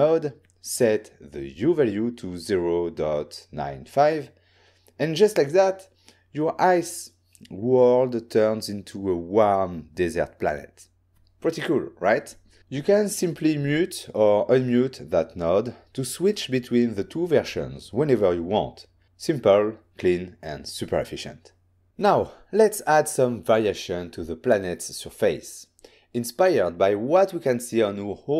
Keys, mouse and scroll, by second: 0.3 click, 3.5 Return, 3.5 typing, 7.5 click, 8.6 m, 9.7 m, 11.3 m, 15.3-16.5 ctrl+scroll down 1, 16.5-18.0 ctrl+scroll up 1.